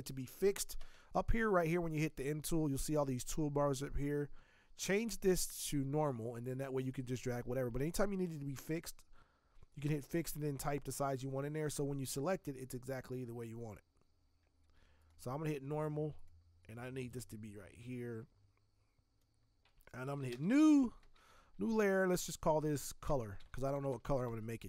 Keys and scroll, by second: 20.3 shift+n, 21.0 ctrl+shift+n, 23.1-24.5 typing.